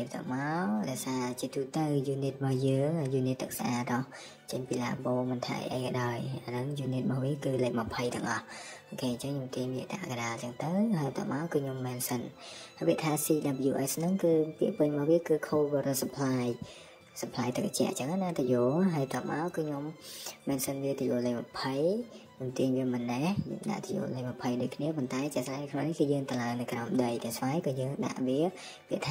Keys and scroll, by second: 0.7 m, 1.9 typing, 4.6 ctrl+z, 6.5 m, 7.6 typing, 10.4 Escape, 11.9 BackSpace, 11.9 BackSpace, 13.2 typing, 14.5 Escape, 16.0-16.4 typing, 17.6 typing, 19.9 Escape, 20.1 Escape, 22.6 Escape, 24.6-27.8 typing, 28.7 Escape.